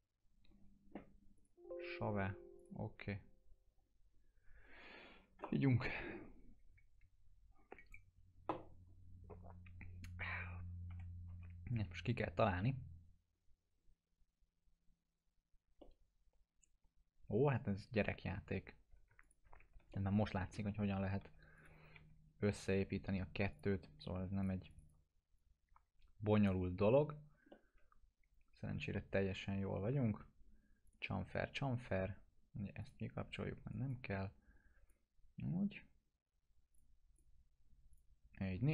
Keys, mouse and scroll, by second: 10.9 F4, 15.7 alt+F4, 15.8-18.6 alt+middle drag, 19.2 ctrl+click, 19.6 alt+q, 19.9 middle click, 20.3 scroll up 1, 21.2 2, 21.5 click, 21.9 2, 23.5-26.6 drag, 27.5-30.0 alt+middle drag, 30.8 click, 33.6 right click, 34.2-35.1 drag.